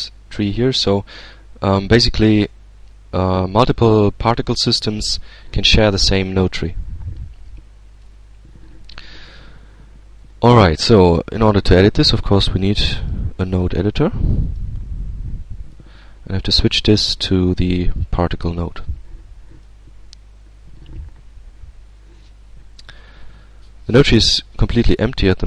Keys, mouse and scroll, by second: 3.4 click, 10.8-12.3 drag, 12.8 click, 14.3 click, 19.3 click, 23.8-25.1 middle drag, 25.1-25.4 scroll up 1.